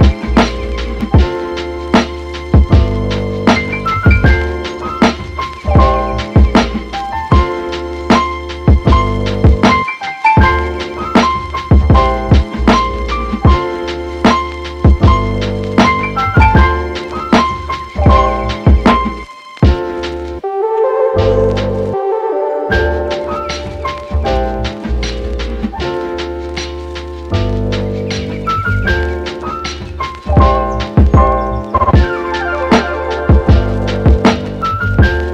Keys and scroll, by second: 0.2 super+s, 0.6 Right, 0.9 BackSpace, 1.2 6, 1.4 Return, 32.0 super+z, 34.9-35.3 typing.